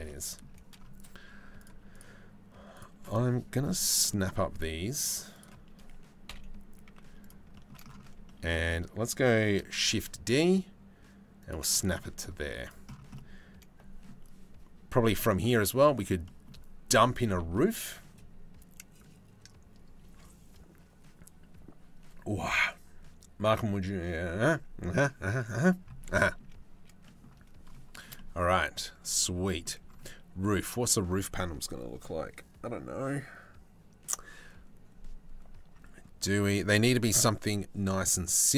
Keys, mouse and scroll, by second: 1.2 click, 1.5 click, 2.4 shift+middle click, 3.6 click, 4.9 shift+right click, 5.9 KP_3, 6.5 z, 9.4 shift+d, 11.5 middle click, 12.0 z, 12.7 middle click, 15.8 middle click, 16.8 middle click, 25.7 middle click, 26.6 click, 27.5 shift+right click, 27.8-28.9 drag, 29.1 shift+middle click.